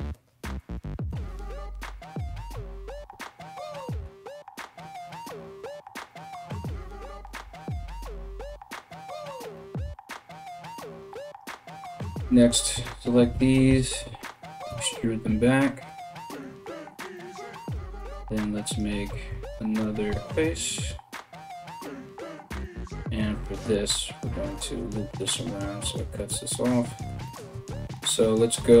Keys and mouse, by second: 0.2 right click, 0.3 g, 7.0 right click, 7.2 g, 10.9 right click, 11.3 right click, 12.1 ctrl+right click, 12.9 e, 17.2 right click, 17.3 middle click, 17.6 right click, 17.9 middle click, 18.3 right click, 18.4 middle click, 19.1 shift+right click, 19.1-28.7 shift+middle drag, 19.7 f, 28.7-28.8 drag.